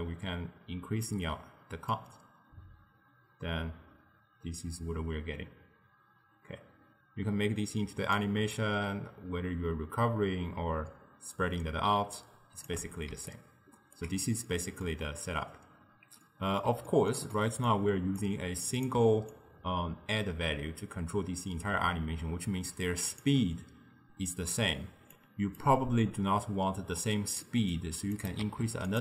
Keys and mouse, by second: 8.6-11.6 shift+drag, 13.2 d, 13.4 right click, 14.0 d, 14.5-18.3 middle drag, 18.3 click, 19.4-22.4 shift+drag, 25.2 click, 27.5-28.2 middle drag, 28.2 click, 28.5 shift+d.